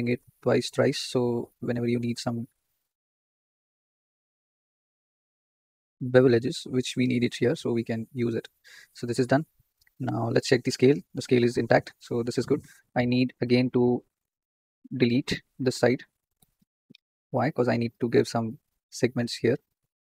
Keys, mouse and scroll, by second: 7.9 Tab, 8.4 scroll down 4, 10.3 click, 13.4 Tab, 13.9 click, 15.5-15.8 scroll up 4, 16.3 x, 17.8 ctrl+r.